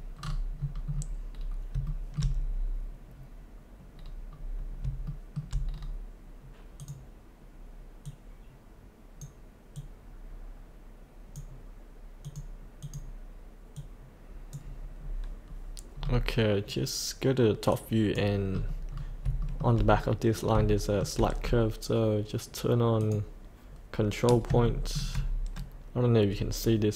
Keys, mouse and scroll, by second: 1.8 shift+middle click, 2.5-3.8 scroll up 1, 4.0-4.4 scroll down 1, 4.4 scroll up 1, 5.1 shift+middle click, 5.6-6.0 scroll down 1, 6.8-15.0 drag, 15.0-17.7 scroll up 1, 17.7 click, 18.6 scroll up 1, 19.6 shift+middle click, 19.8-20.5 scroll up 1, 20.7 shift+middle click, 23.0 click, 24.7 shift+middle click, 26.6 click.